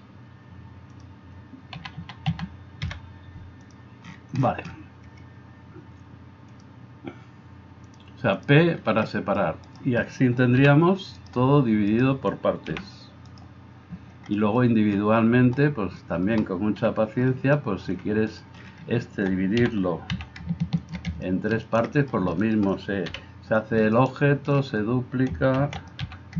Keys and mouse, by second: 1.8 a, 2.1 a, 2.9 a, 2.9 p, 9.7-10.7 middle drag, 9.7-10.7 right drag, 10.7 g, 11.9 middle click, 11.9 right click, 12.7 g, 16.8 KP_1, 19.6 g, 20.9-26.3 middle drag, 23.1 KP_1, 25.7 shift+d, 26.0 g.